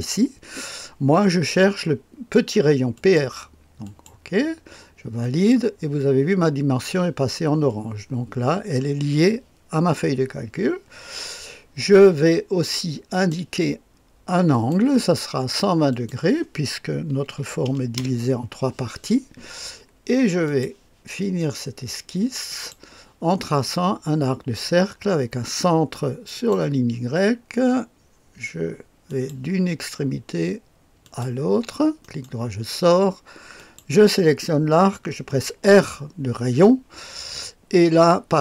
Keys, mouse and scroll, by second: 2.9 click, 3.8 click, 5.2 click, 13.1 click, 14.5 click, 15.8 click, 17.1 KP_1, 17.3 KP_2, 17.6 KP_0, 17.9 Return, 20.4 click, 21.0-25.1 drag, 26.3 click, 29.0 click, 31.0 click, 32.0 middle click, 33.5 click, 35.6 r.